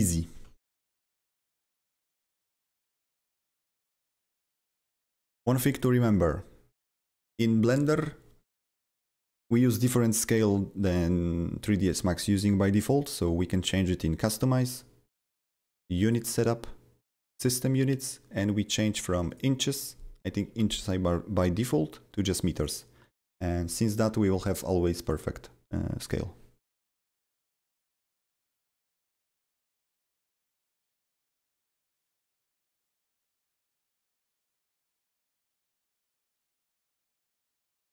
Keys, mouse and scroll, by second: 0.4 alt+middle click, 1.5 alt+scroll down 3, 2.0 alt+middle click, 2.6-14.7 alt+middle drag, 5.7 click, 5.7 click, 6.9 click, 14.7 click, 14.7 click, 15.4 click, 16.0 click, 17.3 click, 19.3 click, 22.7 click, 25.0 click, 26.0 click, 28.1 click, 28.7 click, 31.1-31.6 scroll up 3, 31.6-37.9 middle drag, 35.8 click, 36.7 click, 36.7 click.